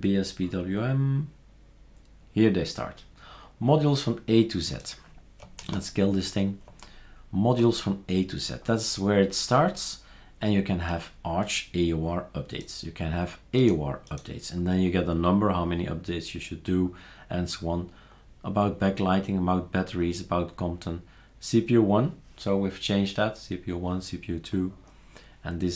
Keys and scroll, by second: 5.6 super+q.